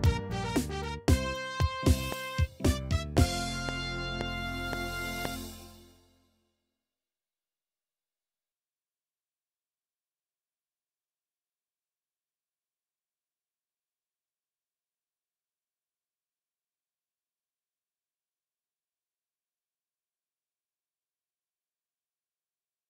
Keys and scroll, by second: 5.3 space.